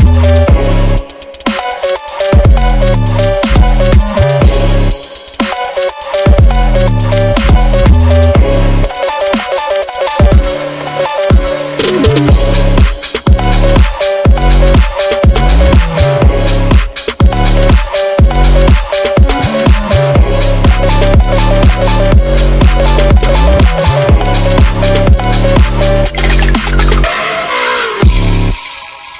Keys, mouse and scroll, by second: 0.0-6.0 typing, 0.1 shift+click, 0.5 shift+click, 1.2 shift+click, 1.7 shift+click, 2.3 scroll down 1, 2.5 shift+click, 2.7 click, 3.3 click, 3.8 shift+click, 4.7 click, 5.7 click, 6.3 scroll down 2, 7.0 right click, 7.5-8.0 scroll down 10, 8.0 click, 9.3 click, 10.0 click, 11.2 click, 12.5 /, 12.8 click, 13.1 s, 14.1-14.7 drag, 15.8 g, 16.2 click, 16.8-17.2 scroll down 2, 17.2 click, 17.4 scroll up 3, 17.7 scroll down 1, 17.8 click, 18.0 scroll up 1, 18.1 scroll down 1, 19.2 Tab, 19.4 e, 20.6 Tab, 20.9 scroll down 4, 20.9 click, 21.1 scroll up 4, 21.2 click, 23.1 ctrl+z, 23.2 ctrl+z, 23.4 ctrl+z, 23.6 Tab, 23.8 s, 26.1 click, 26.9 s, 27.4 g, 27.9 scroll down 4, 28.0 click, 28.7 scroll up 3, 28.7 click, 28.9 g.